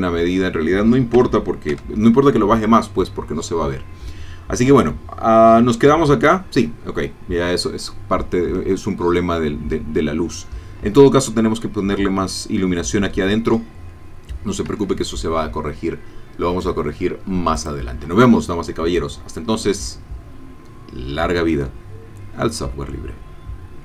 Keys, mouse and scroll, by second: 1.1 KP_0, 1.7 F12, 14.7 Escape, 17.5 click.